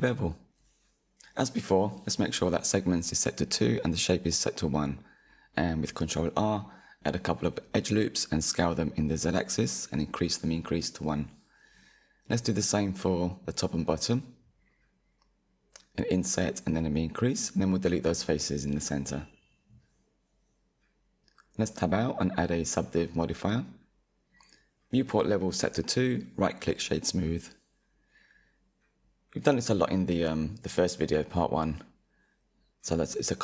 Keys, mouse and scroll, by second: 0.9-2.0 middle drag, 2.0 ctrl+r, 3.8 s, 7.4-8.2 drag, 8.2-9.1 middle drag, 9.1 3, 9.3 click, 9.7-10.4 middle drag, 10.4 shift+click, 11.2-12.3 middle drag, 14.0-15.7 drag, 15.7 Delete, 19.1 middle click, 20.0 Tab, 21.0-24.0 drag, 25.0-26.0 right drag, 26.0-28.1 middle drag, 28.1 click, 29.3-31.1 middle drag, 31.1-31.9 scroll down 5, 31.9 KP_1, 32.8 scroll up 3.